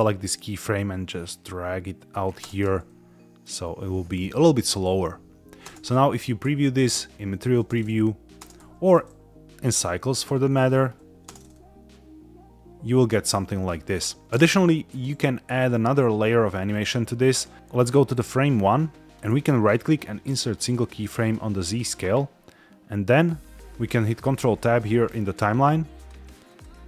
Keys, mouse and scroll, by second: 0.1-2.0 drag, 2.4 space, 5.6 space, 5.8 z, 7.5 space, 8.3 space, 8.5 z, 9.9 scroll up 2, 10.4 shift+middle drag, 10.8 scroll down 1, 11.2 space, 14.3 space, 14.8 click, 16.7 click, 17.7 drag, 19.5-20.7 right drag, 23.0 click, 24.1 ctrl+Tab, 25.8 click.